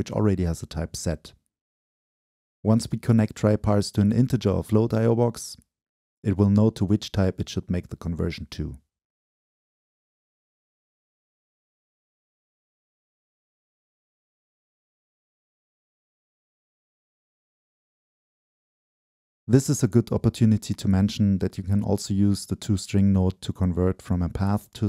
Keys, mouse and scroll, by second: 0.3-3.3 drag, 3.9 Return, 5.3-7.3 drag, 7.3 Return, 8.8-9.5 drag, 10.3-11.3 drag, 13.2-14.4 middle drag, 14.4-15.5 drag, 15.5-16.4 middle drag, 16.4-18.5 scroll down 2, 18.5 scroll down 1, 19.2-21.2 drag, 21.6 Return, 22.8-24.1 drag, 24.1-24.8 middle drag.